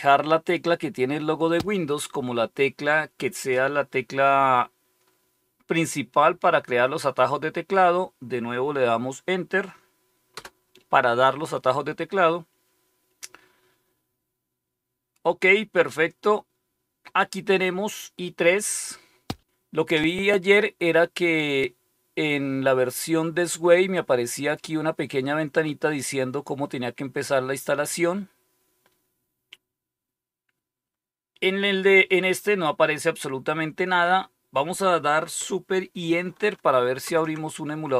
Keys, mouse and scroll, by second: 10.2 Return, 32.9 click, 36.9 super+Return.